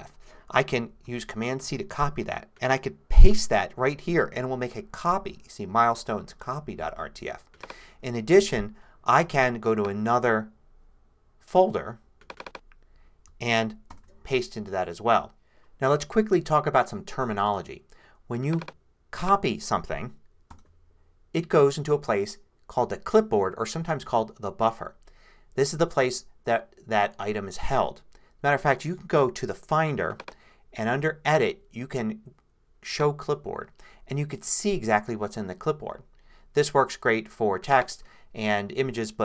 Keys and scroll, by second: 1.6 super+c, 3.3 super+v, 13.9 super+v, 20.5 super+c.